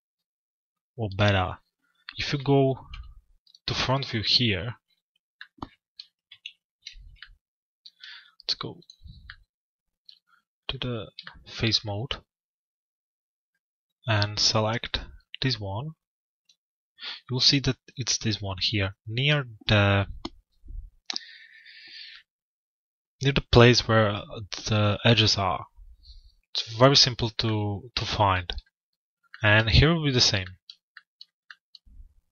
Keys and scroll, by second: 5.9 f.